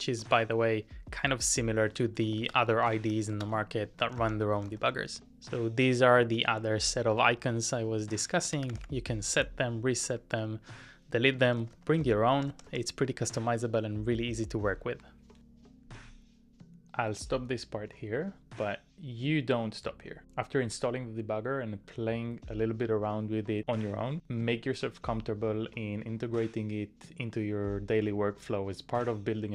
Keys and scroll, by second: 0.2 typing, 2.4 ctrl+w, 2.5 Left, 2.8-9.3 typing, 3.3 ctrl+w, 11.3-12.0 typing, 13.3 typing, 16.4 typing.